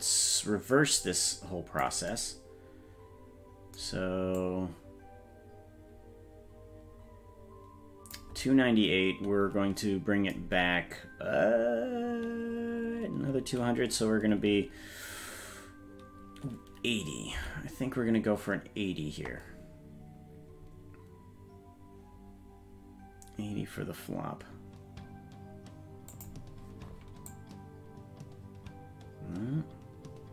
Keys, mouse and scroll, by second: 4.4-8.1 drag, 27.3-30.3 drag.